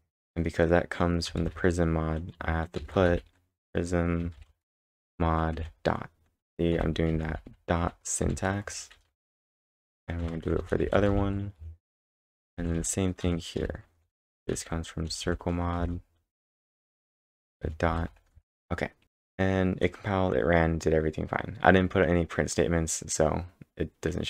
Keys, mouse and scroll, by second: 1.4-2.9 typing, 4.4 shift+_, 4.8 shift+m, 6.5-8.8 typing, 10.2 shift+_, 10.6 shift+m, 11.8-19.0 typing, 19.0 Return, 19.0 Tab.